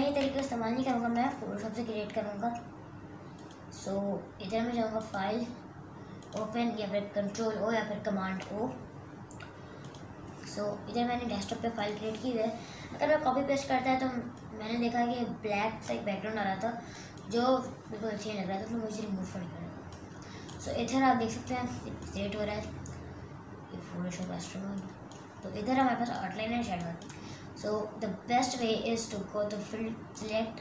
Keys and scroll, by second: 0.4 super+KP_Subtract.